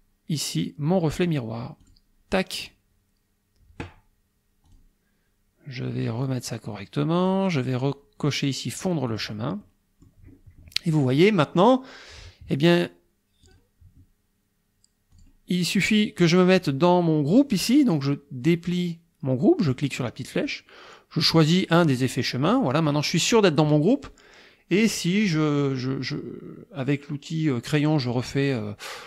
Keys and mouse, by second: 1.8 click, 4.7 click, 6.2-7.5 drag, 9.1 click, 9.7 click, 13.5 click, 15.1 click, 16.6 click, 20.3 click, 21.2 click, 21.7 click, 22.5 click, 22.9 click, 25.3 click.